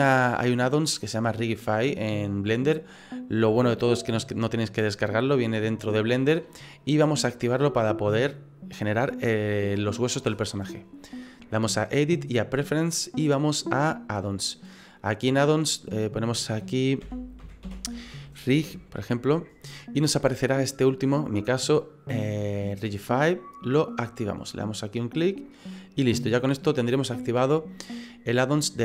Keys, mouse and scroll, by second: 11.6 click.